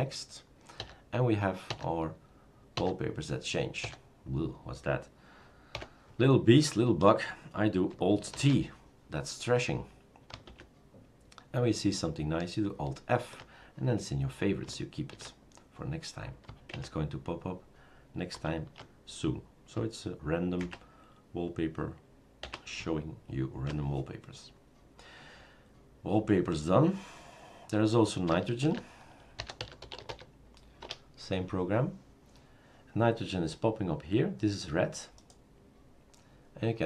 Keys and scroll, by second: 1.7 alt+n, 2.7 alt+n, 5.8 alt+Left, 8.5 alt+t, 10.6 alt+Right, 15.1 alt+t, 16.7 alt+Right, 18.5 alt+t, 20.6 alt+Right, 22.4 alt+Right, 28.6 shift+super+d, 29.1-30.6 typing, 30.8 Return.